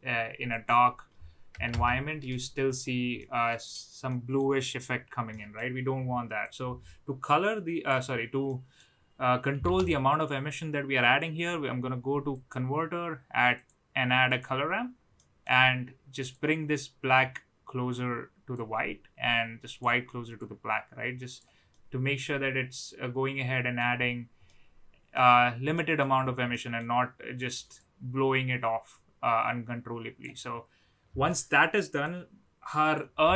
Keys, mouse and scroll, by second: 0.5-2.1 drag, 3.1-3.5 middle drag, 4.0-4.3 middle drag, 5.3 middle click, 6.4-7.8 drag, 8.5 middle click, 9.7 shift+a, 15.2 middle click, 16.3-18.0 drag, 18.6-19.8 drag, 20.4 click, 21.7-23.7 middle drag, 24.4-25.1 middle drag, 25.7 middle click, 26.5 middle click, 27.7-30.2 drag, 31.3-32.0 middle drag, 32.9 click.